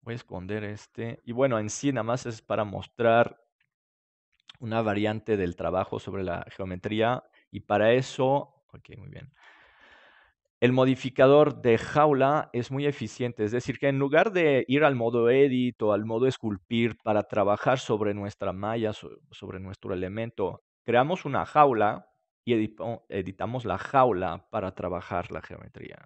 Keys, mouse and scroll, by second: 1.7 click, 2.9 click, 2.9-4.5 right drag, 5.2-8.4 right drag, 5.8 Tab, 7.4-9.2 drag, 9.7-11.9 middle drag, 11.1-17.7 right drag.